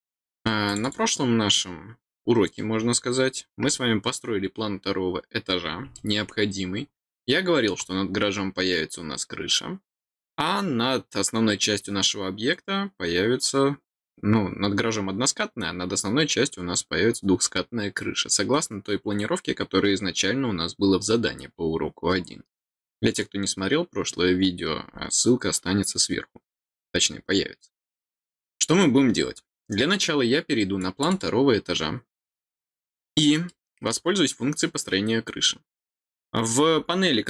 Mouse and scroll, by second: 0.6 click, 0.8 click, 5.9-7.6 middle drag, 30.7 click, 31.0 click, 32.4-32.9 middle drag, 32.9-33.4 scroll down 1, 33.4-33.8 middle drag.